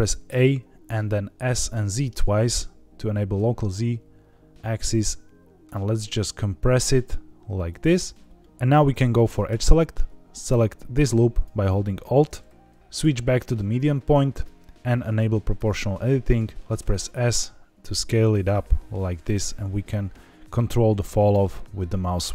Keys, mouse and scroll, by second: 0.2 a, 1.4 s, 1.7 z, 1.9 z, 7.6 click, 8.3 middle click, 9.4 2, 11.2 alt+click, 12.7 Escape, 12.7 s, 12.8-14.4 drag, 15.5 click, 16.7 s, 18.8-19.7 scroll up 3, 19.8-20.2 scroll down 3, 20.2-20.6 scroll up 3, 20.6-21.6 scroll down 5.